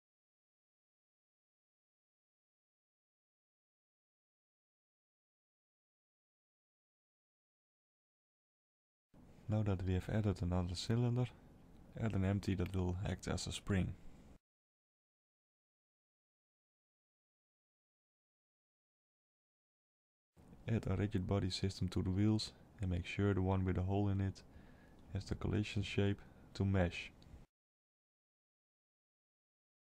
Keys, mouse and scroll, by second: 2.0 KP_7, 3.1 s, 4.6 alt+a, 5.0 middle click, 6.5 shift+middle click, 6.9-7.4 shift+scroll up 1, 7.4 shift+a, 11.6-13.8 scroll up 2, 13.8 click, 14.5 shift+click, 18.0 click, 19.3 click, 28.5 click.